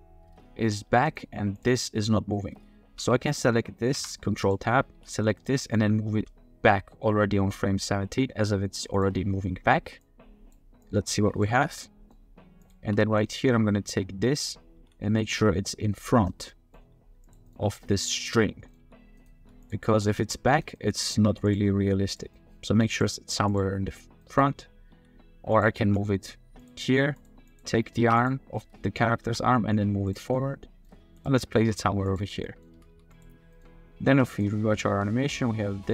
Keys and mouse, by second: 0.9 g, 1.0 click, 1.5 click, 4.0 ctrl+Tab, 4.4 click, 4.9 g, 5.6 click, 6.1 g, 8.9 drag, 10.8 click, 11.6-12.1 middle drag, 13.0 middle click, 14.8 g, 16.5 middle drag, 16.7 click, 16.8 g, 17.5 click, 17.6-18.1 middle drag, 18.4 middle drag, 18.7 click, 18.8-21.6 typing, 19.2 click, 19.9 click, 20.5-20.9 drag, 21.4 click, 22.3-22.6 drag, 22.7 g, 23.3 g, 23.5 click, 24.2 click, 24.9 g, 25.8 r, 25.9 click, 28.0 ctrl+Tab, 28.2 click, 28.6-29.0 drag, 29.0 middle drag, 29.3 g, 30.4-30.9 middle drag, 31.0-32.9 typing, 31.2 click, 32.4 click, 33.5 click, 34.4-35.9 drag.